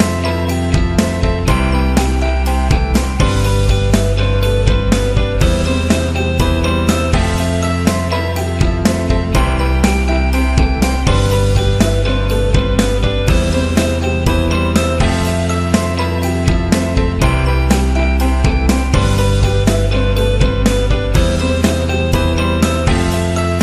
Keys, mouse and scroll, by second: 0.0 click, 0.4 space, 4.4 click, 6.4 click, 8.8 click, 10.7 click, 12.8 click, 15.3 click, 17.1 click, 18.3 click, 19.6-20.0 scroll up 2, 21.3 click, 21.9 click.